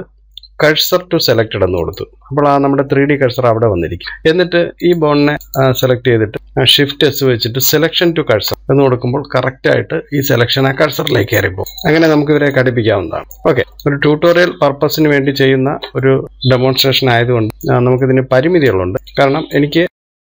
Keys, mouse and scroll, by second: 0.5 shift+s, 5.5 click, 12.0-12.8 scroll down 4, 12.8 click, 13.4-13.9 scroll down 15, 13.9 shift+middle click, 14.3 scroll down 1, 14.8-16.0 shift+middle drag, 16.0 scroll up 4, 16.2 shift+middle click, 16.9 scroll up 1, 18.0 KP_3, 18.9 click, 19.7 click.